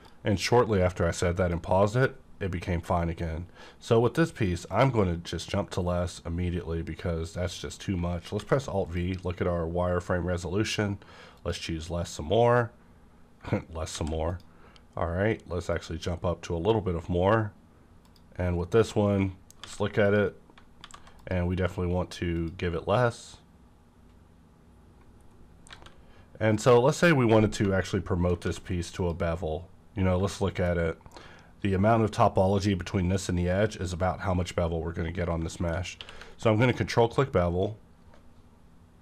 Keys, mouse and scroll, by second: 2.0 click, 2.0 scroll up 1, 4.7 click, 8.3 alt+v, 8.8 click, 11.3 click, 13.9 alt+v, 14.3 click, 15.7 click, 18.0 click, 19.6 alt+v, 20.0 click, 20.8 alt+v, 21.2 click, 22.3 click, 25.2-25.6 scroll down 1, 25.7 alt+a, 26.0 scroll up 1, 26.5 click, 28.4 alt+v, 29.0 click, 29.5 scroll up 1, 30.4 shift+middle click, 30.9 scroll up 1, 33.8-34.7 scroll down 2, 34.7-35.0 scroll up 1, 35.5 middle click, 35.7 scroll up 1, 36.0 q, 36.6 click.